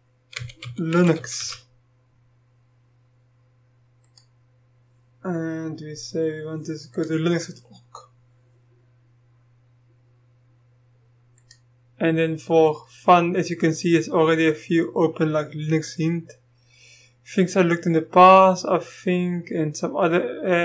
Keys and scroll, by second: 0.1-2.1 typing.